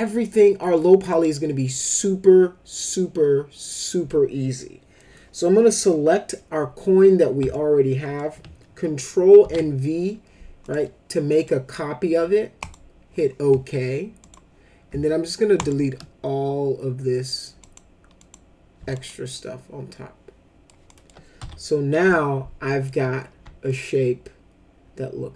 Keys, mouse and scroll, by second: 0.6 middle click, 1.1 click, 7.5 alt+middle click, 9.4 ctrl+v, 10.6 click, 11.4 click, 12.6 click, 14.2 click, 15.6 shift+click, 17.6 click, 18.2 click, 18.9-20.6 alt+middle drag, 18.9 alt+right drag, 20.9 alt+middle click, 21.4 F4, 22.1 alt+middle click, 23.6-25.3 alt+middle drag.